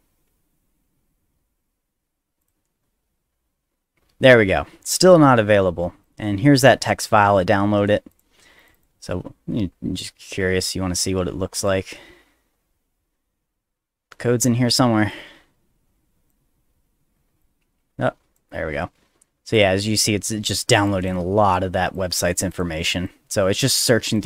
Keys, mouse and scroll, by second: 2.4 click, 6.0-6.7 drag, 8.1 click, 8.6 click, 8.7 click, 10.0-11.0 drag, 11.6 click, 12.2 middle click, 12.6 middle click, 12.9 middle click, 15.1-16.3 drag, 16.6 middle click, 17.4 click, 18.7 middle click, 19.1 middle click, 19.5 click, 19.9 middle click, 20.4 middle click, 20.9 click, 21.4 middle click, 21.9 click, 22.5 click, 23.0 click, 23.7 click, 24.1 click.